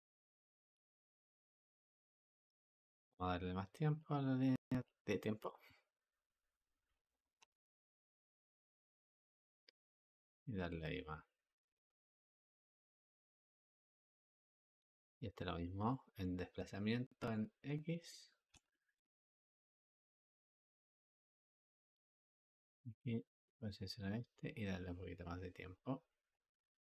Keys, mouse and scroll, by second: 0.6 space, 2.4 Escape, 5.2 space, 7.1 Escape, 8.6 g, 11.0-14.0 drag, 14.7 click, 17.1-23.4 drag, 23.8 click, 26.2-26.8 drag.